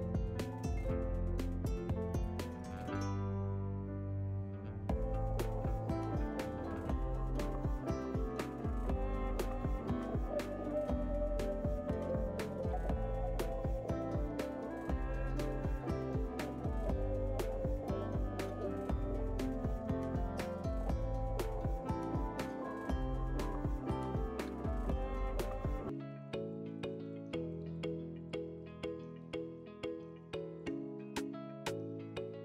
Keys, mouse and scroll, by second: 2.7 shift+a, 4.7-5.3 scroll down 1, 5.3 middle click, 5.3 scroll down 2, 6.2 middle click, 6.5-7.3 scroll up 2, 15.0 shift+middle click, 15.9 Tab, 16.6 middle click, 18.6 ctrl+r, 32.1 ctrl+z.